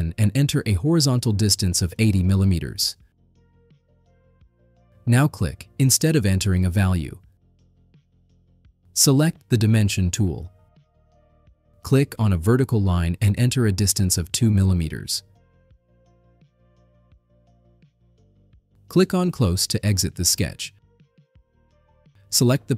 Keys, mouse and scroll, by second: 0.3 click, 2.5 0, 3.1 Tab, 6.6 click, 11.2 click, 12.3 click, 13.7 click, 16.1 2, 17.0 Return, 21.3 click.